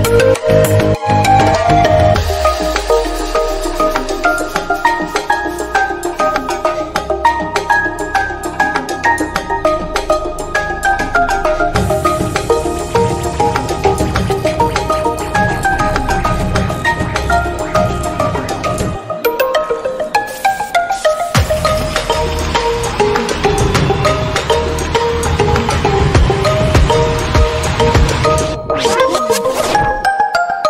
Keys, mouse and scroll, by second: 0.9-2.1 shift+drag, 2.1 middle click, 2.8 shift+click, 3.8 ctrl+x, 4.0 scroll down 1, 4.1 middle click, 4.4 Tab, 4.9 click, 5.1-5.8 scroll down 2, 5.8 Tab, 6.1 shift+middle click, 6.4-6.9 scroll up 1, 6.9 click, 7.1 shift+middle click, 7.8 ctrl+r, 8.5 scroll up 1, 9.0 click, 9.5 shift+click, 10.1 KP_Decimal, 11.8 shift+click, 12.1 middle click, 12.8 shift+click, 13.7 ctrl+x, 14.0 scroll down 1, 14.2 middle click, 14.9-15.6 drag, 16.2 click, 16.8-17.8 shift+middle drag, 17.8 /, 18.4 shift+middle click, 19.0 KP_7, 19.9-20.5 scroll down 3, 20.5 shift+middle click, 21.3 alt+z, 21.8 1, 22.1-23.8 drag, 24.1 Tab, 24.8 alt+z, 25.1 click, 25.6 Tab, 26.3 3, 26.5 click, 26.7 middle click, 27.3 KP_Decimal, 27.5-27.9 scroll down 1, 27.9 e, 28.9 middle click, 29.6 scroll up 1, 29.7 middle click, 30.2 click.